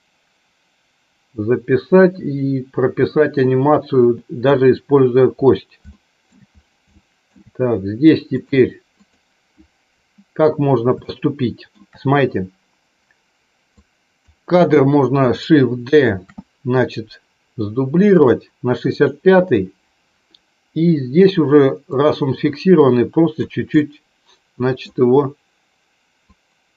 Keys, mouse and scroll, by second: 5.9 shift+middle click, 6.7 shift+middle click, 8.2-9.4 drag, 10.9 shift+middle click, 13.7 click, 15.9 shift+d, 18.9 click, 21.9-23.4 drag, 23.7-24.7 middle drag, 26.1-26.7 drag.